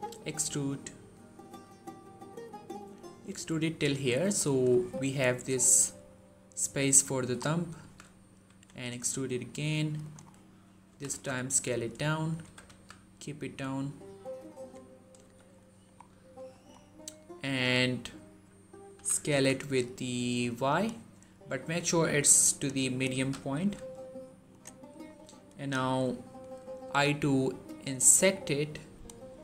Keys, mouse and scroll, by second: 3.9 click, 4.2 scroll down 1, 4.6 shift+middle click, 7.0 shift+middle click, 7.2 scroll up 1, 7.7 z, 8.3 e, 9.9 click, 10.2-10.7 scroll down 1, 10.7 s, 11.0 z, 12.1 click, 12.3 g, 12.5 z, 14.4 click, 15.4 middle click, 15.8-16.4 scroll up 1, 16.4 middle click, 16.6-17.0 scroll up 1, 17.0-17.6 middle drag, 18.8 s, 19.2 y, 20.6 right click, 21.5 click, 23.0 s, 23.4 y, 24.3 click, 24.6 middle click, 26.7 i, 28.8 right click.